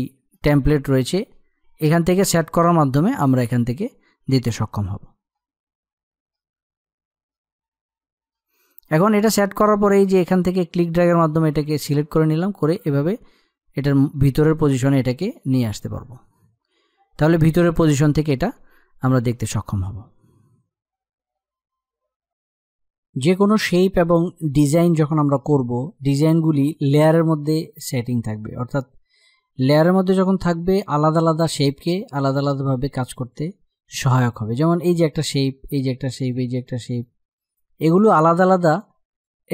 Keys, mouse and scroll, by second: 3.1 click, 8.7-17.5 drag, 29.3 click.